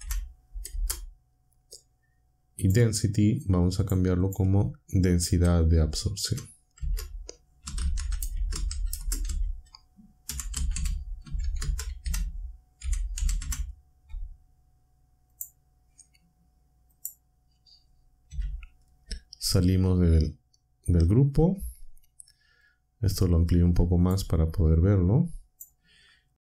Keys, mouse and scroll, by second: 0.0-0.7 typing, 2.4-3.1 typing, 2.6 click, 3.8 click, 4.2 click, 5.3 End, 6.1-13.9 typing, 15.3 click, 16.9 click, 18.2 n, 19.6 Tab, 22.6-24.2 drag, 24.8-25.7 drag.